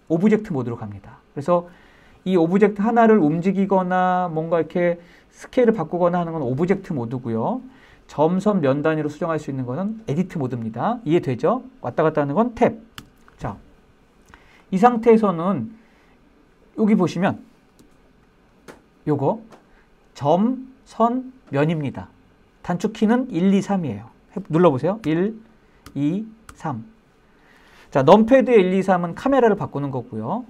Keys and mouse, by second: 12.1 Tab, 13.7 click, 14.3 middle click, 24.1 1, 25.0 2, 25.6 3.